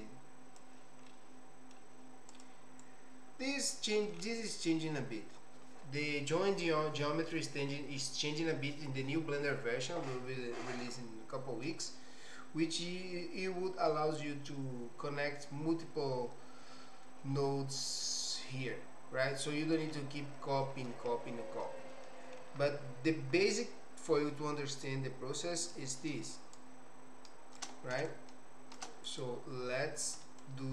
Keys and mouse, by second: 1.1 middle click, 3.0 click, 19.6 middle click, 20.3 middle click, 21.6 middle click, 23.5 middle click, 24.8-25.8 drag, 26.7 ctrl+shift+click, 28.1 ctrl+shift+click, 29.2 click, 30.4-30.7 ctrl+shift+right drag.